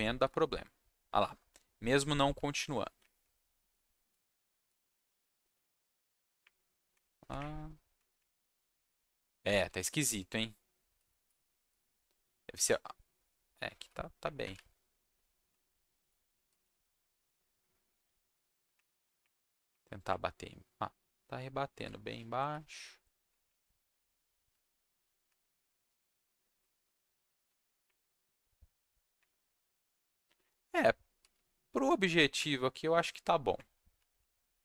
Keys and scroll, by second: 1.2 w, 2.3 Down, 3.0 Up, 3.7 Down, 4.1-6.1 typing, 6.4 Up, 7.0 Down, 7.3 Up, 8.1 Up, 9.4 Down, 9.6-13.2 typing, 14.2 Up, 14.5 Down, 16.1 s, 16.6 w, 16.9 w, 18.6 Up, 19.2 Up, 19.9 Up, 21.1 s, 22.2 w, 23.1 Down, 23.4 Up, 24.0 Down, 24.5 Down, 25.2 Down, 25.6 s, 26.0 w, 26.7 s, 27.4 Down, 27.8 Up, 29.7-32.0 typing, 32.3 Down, 33.2 Up, 33.9 Down.